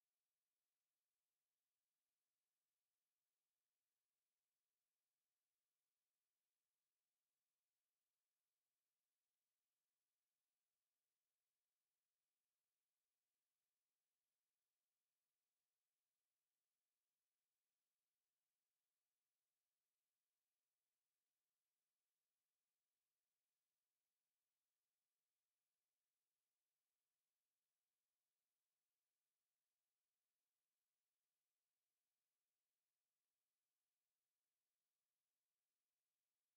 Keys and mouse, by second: 0.7 click, 2.3 alt+click, 2.8 alt+right click, 3.2 alt+click, 4.3 r, 5.3 click, 8.1 click, 8.6 alt+right click, 9.0 alt+click, 10.2 alt+click, 11.3 click, 31.4 click, 32.7 alt+click, 34.7 alt+click, 35.9 alt+click, 36.4 alt+click.